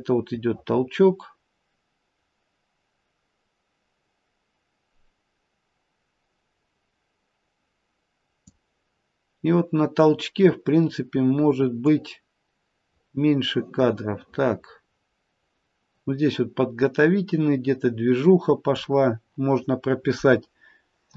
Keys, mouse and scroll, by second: 11.9 click.